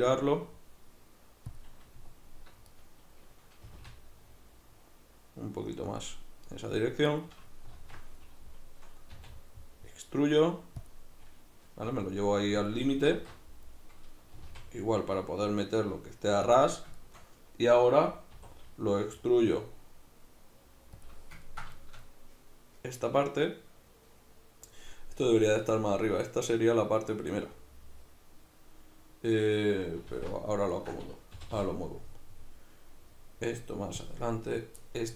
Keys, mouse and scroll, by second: 1.6 click, 2.7 right click, 3.6 g, 6.0 click, 7.1 right click, 7.7 alt+q, 9.1 e, 10.9 click, 11.9 g, 12.7 click, 13.1 alt+q, 14.4 g, 16.6 shift+click, 17.0-21.1 shift+middle drag, 18.4 e, 21.1 click, 21.4-34.1 ctrl+middle drag, 30.1 alt+q, 31.4 g, 34.1 click, 34.5 right click, 34.8 middle click.